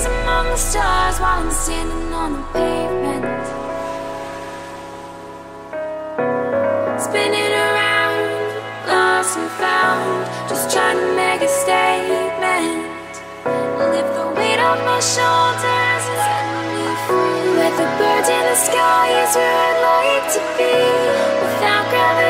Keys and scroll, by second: 0.7 ctrl+t.